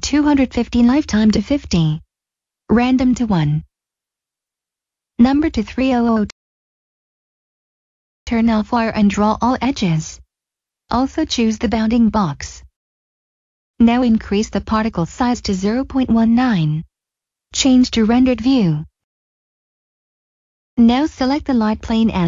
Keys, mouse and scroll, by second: 0.1 click, 1.2-1.6 typing, 2.3 click, 3.5 1, 4.0 Return, 5.6 click, 6.0 Return, 7.1 click, 9.1 click, 12.7 middle click, 13.9 click, 14.7-16.1 scroll down 1, 16.1 click, 18.7 middle click, 20.9 click.